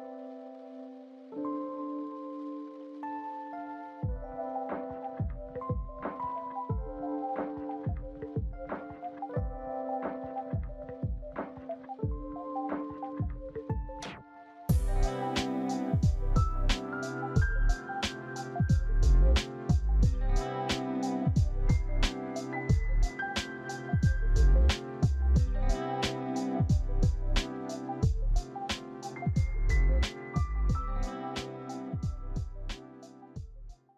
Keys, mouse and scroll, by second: 0.4 double click, 2.6 e, 13.1 double click, 19.0 alt+shift+middle click, 24.2 alt+click, 31.2 double click, 32.3 double click.